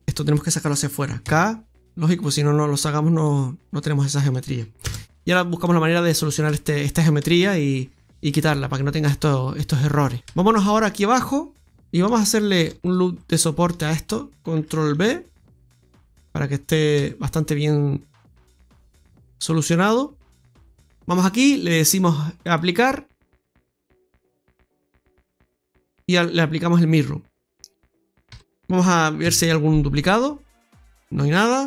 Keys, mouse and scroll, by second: 1.1 k, 5.5 middle click, 7.4 Tab, 7.6-8.1 scroll down 1, 8.1 middle click, 8.1-8.5 scroll down 1, 10.6 Tab, 11.1-11.5 scroll up 2, 11.7 middle click, 12.5 right click, 12.7 alt+shift+right click, 14.8 ctrl+b, 16.3-16.9 scroll down 2, 16.9 Tab, 17.1 scroll down 1, 17.5 middle click, 20.4 click, 22.3 click, 23.4 Tab, 24.6 click, 26.4 Tab, 28.2 a, 29.1 m.